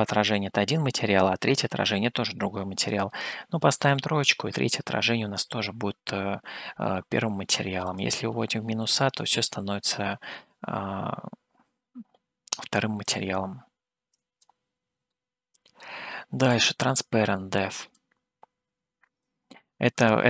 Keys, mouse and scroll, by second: 2.9-14.7 drag, 15.1 middle click, 18.0-19.3 drag.